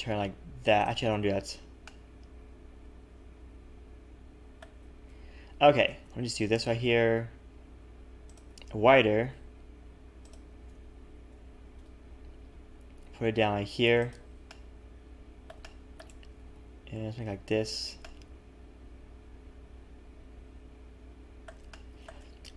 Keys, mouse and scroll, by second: 1.1 ctrl+z, 1.8 middle click, 4.0 z, 5.0 KP_1, 5.9 s, 8.5 s, 10.7 KP_3, 11.2-11.5 scroll up 1, 11.8 g, 14.5 middle click, 15.6 shift+middle click, 16.4 s, 18.0 middle click, 21.7 shift+middle click.